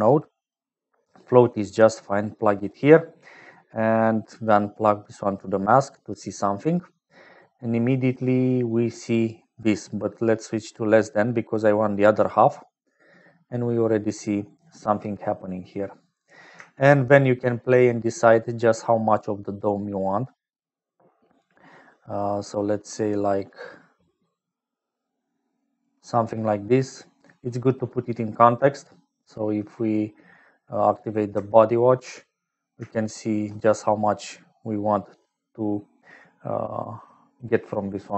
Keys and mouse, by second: 1.8 click, 4.8 click, 6.3 click, 9.6-12.0 drag, 13.3-14.5 drag, 17.2-25.8 shift+middle drag, 29.5 middle click, 30.6 click, 32.9 shift+click.